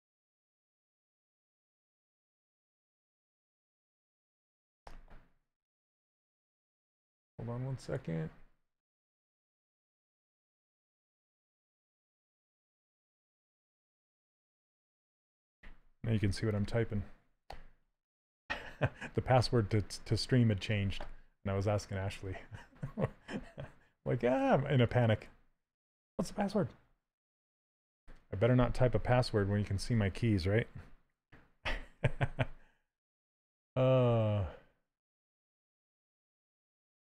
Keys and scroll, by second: 8.8-10.6 typing, 10.9 Return, 11.8-16.5 typing, 26.4 q, 31.6 w.